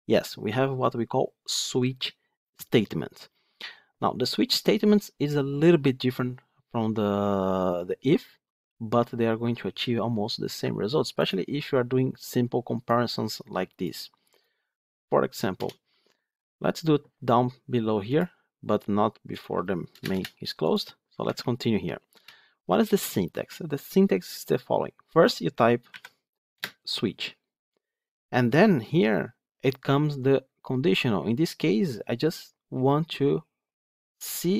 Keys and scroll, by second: 21.1 Tab, 26.5 Return.